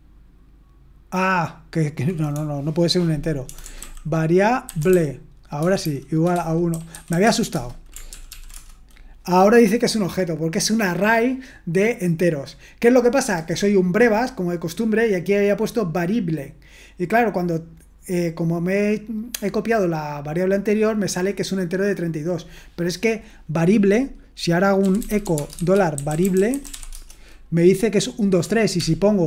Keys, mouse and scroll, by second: 2.4-7.2 typing, 7.5 Return, 8.1 ctrl+p, 8.3 ctrl+p, 24.6-27.2 typing, 28.8 ctrl+p.